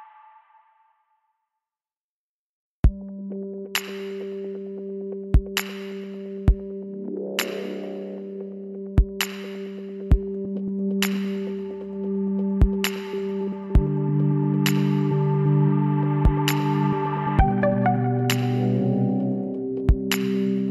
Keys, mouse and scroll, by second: 2.7-4.8 middle drag, 4.8 click, 5.1 Tab, 5.1-6.3 right drag, 6.5 middle click, 6.7 Tab, 7.8 Tab, 9.4 right click, 9.4 l, 10.4 middle click, 10.5-12.3 drag, 13.4 Tab, 14.3 Tab, 18.6-20.2 drag, 20.4-20.7 drag.